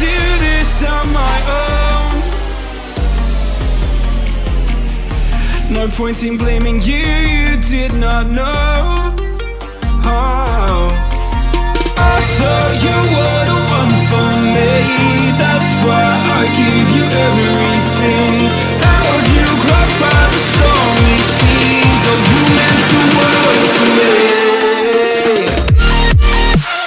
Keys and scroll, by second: 2.9 space, 3.4 super+space, 3.5 super+space, 3.6 super+space, 7.5 space, 8.0 alt+super+space, 8.1 alt+super+space, 8.2 alt+super+space, 8.3 alt+super+space, 8.4 alt+super+space, 8.5 alt+super+space, 9.0 alt+super+space, 9.4-10.0 alt+super+space, 11.0-13.0 typing, 18.4 space, 18.9 super+space, 21.2 super+c, 22.5 space, 23.0-23.9 alt+super+space, 23.2 alt+super+space, 23.3 alt+super+space, 23.4 alt+super+space, 23.5 alt+super+space, 23.6 alt+super+space, 23.7 alt+super+space, 24.0 alt+super+space, 24.8-26.1 alt+super+space.